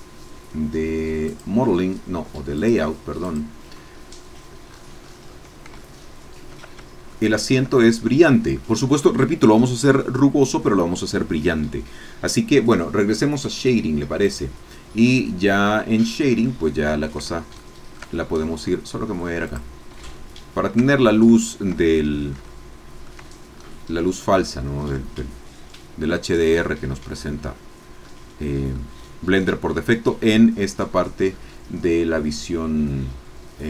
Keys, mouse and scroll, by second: 1.3 click, 2.5 click, 3.2 click, 4.7-5.2 scroll up 2, 5.2 scroll down 2, 5.8 shift+middle click, 7.2 shift+middle click, 7.8-8.7 shift+scroll up 1, 8.7-12.5 scroll down 1, 14.3 click, 15.0-17.2 middle drag, 17.2 ctrl+scroll up 1, 17.3 ctrl+scroll down 1, 17.5 ctrl+shift+click, 17.7 shift+middle click, 18.1-18.6 shift+scroll down 2, 19.5 click, 20.0 shift+click, 20.8-21.3 shift+scroll down 1, 21.4 shift+click, 22.1-23.2 shift+middle drag, 23.5-23.8 shift+scroll up 3, 28.1 middle click.